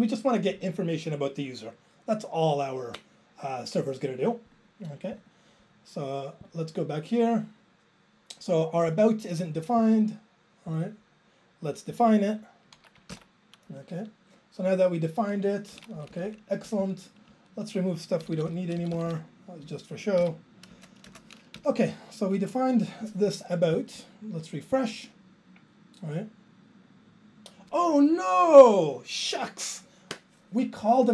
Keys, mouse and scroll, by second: 5.3 click, 13.6 click, 13.7 ctrl+j, 15.7 Right, 15.9 Up, 16.0 Up, 16.2 Up, 16.6 Up, 17.3 Up, 18.3 ctrl+k, 18.4 ctrl+k, 18.5 ctrl+k, 18.6 ctrl+k, 18.8 ctrl+k, 18.9 ctrl+k, 19.1 ctrl+k, 20.2 ctrl+k, 20.7 BackSpace, 21.1 BackSpace, 21.6 Down, 26.5 super+s.